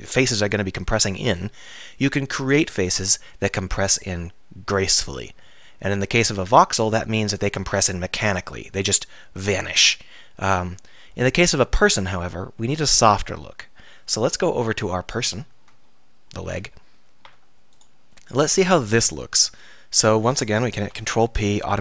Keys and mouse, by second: 7.9-15.4 middle drag, 19.8 middle click, 21.0 ctrl+p.